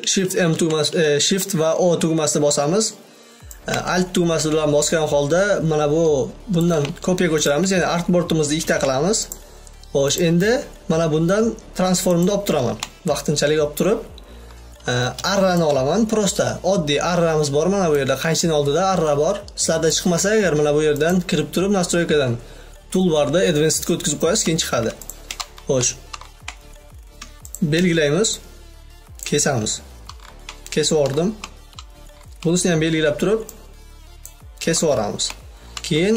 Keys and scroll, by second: 8.9 v, 19.1 v.